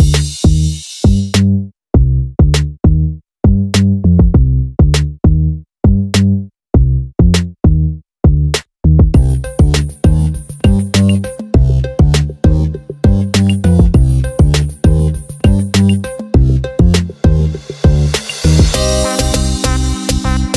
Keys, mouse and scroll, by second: 0.9-2.5 drag, 2.8 click, 3.7-5.1 drag, 5.8-8.4 drag, 10.5 click, 11.2 click, 11.6-18.8 drag.